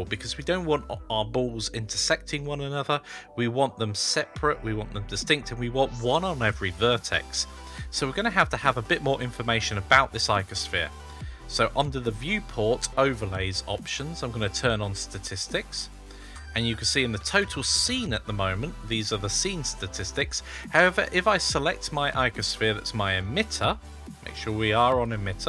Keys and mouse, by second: 10.0 click, 12.8-16.2 drag, 20.5 click, 24.7 click.